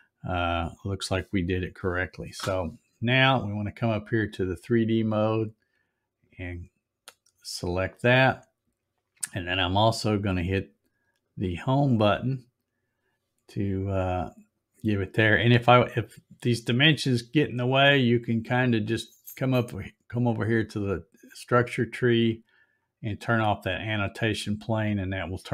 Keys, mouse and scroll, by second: 6.3 click, 11.3 click, 22.6 click.